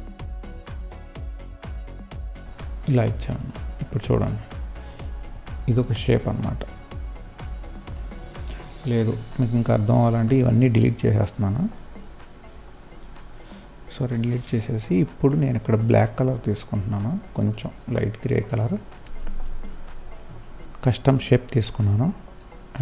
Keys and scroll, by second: 10.8 Delete.